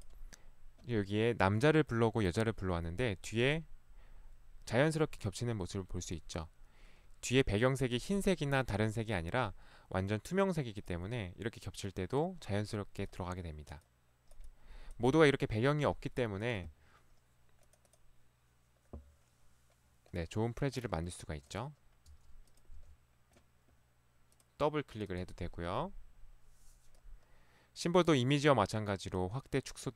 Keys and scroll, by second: 22.1 Delete, 22.8 Delete.